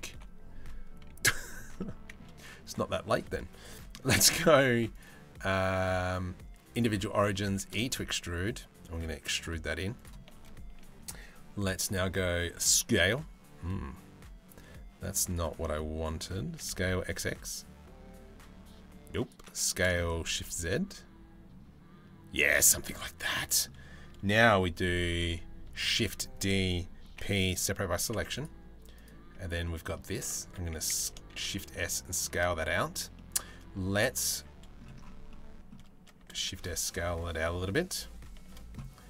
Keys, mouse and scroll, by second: 1.4 middle click, 3.3 middle click, 4.6-6.4 middle drag, 7.1 e, 11.3 middle click, 12.1 s, 15.1 middle click, 16.1 s, 19.3 s, 22.3 middle click, 25.3 shift+d, 26.7 p, 27.7 Tab, 28.6 middle click, 29.2 middle click, 30.0 Tab, 30.0 a, 30.6 s, 32.8-34.4 middle drag, 34.9 middle click, 35.8 s.